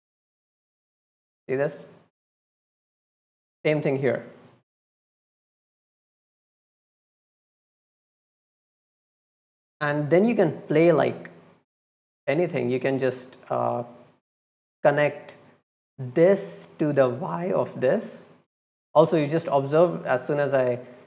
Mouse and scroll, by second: 4.0-4.6 drag, 5.4-8.6 drag, 9.2-9.7 drag, 10.7-11.0 drag, 15.8-17.9 drag.